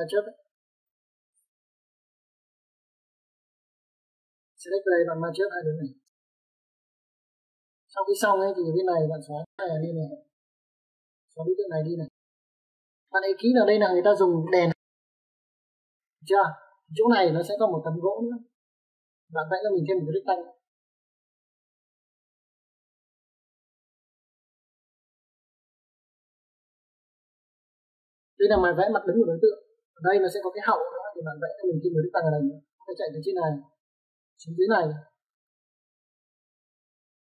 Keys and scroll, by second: 0.4 m, 2.5 Escape, 3.1 n, 9.0 space, 9.1 Escape, 9.1 `, 11.0 e, 11.1 space, 12.8 space.